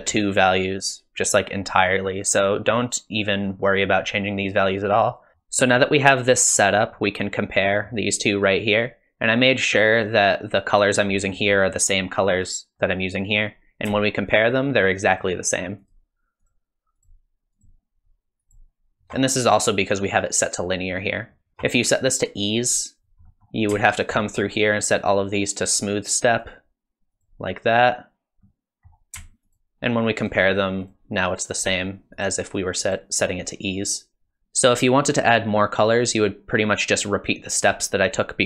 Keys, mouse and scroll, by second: 5.3 middle click, 5.3-5.7 scroll down 5, 7.0 middle click, 11.2 middle click, 12.8 middle click, 14.3 ctrl+shift+click, 15.1 ctrl+shift+click, 15.8 ctrl+shift+click, 16.4 ctrl+shift+click, 17.0 ctrl+shift+click, 17.6 ctrl+shift+click, 18.4 ctrl+shift+click, 21.5 ctrl+shift+click, 21.8 click, 23.3 middle click, 23.9 ctrl+shift+click, 24.2 middle click, 24.8 click, 26.4 click, 28.4 middle click, 29.5 ctrl+shift+click, 30.2 ctrl+shift+click, 30.8 ctrl+shift+click, 31.5 ctrl+shift+click, 32.2 ctrl+shift+click, 32.9 ctrl+shift+click, 37.7 click.